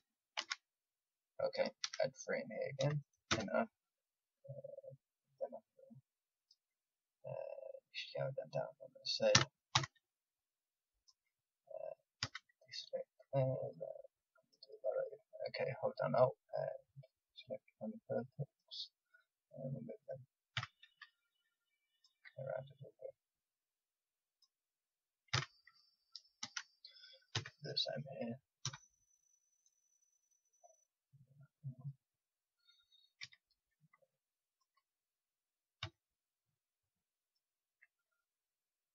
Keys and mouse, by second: 0.3 ctrl+z, 1.8 ctrl+r, 9.3 s, 12.2 a, 13.2-18.5 drag, 20.5 a, 21.9-25.3 drag, 25.3 a, 26.4 ctrl+r, 33.2 a, 34.5-38.9 drag, 35.8 a.